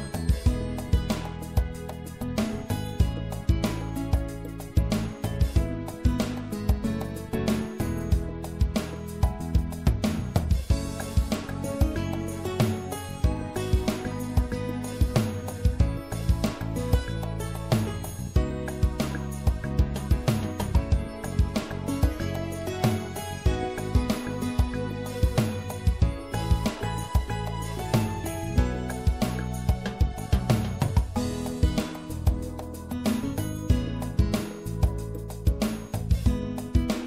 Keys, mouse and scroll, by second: 6.3 ctrl+r, 13.0-17.0 middle drag, 17.9 ctrl+r, 26.7 click, 32.0 i, 36.7 click.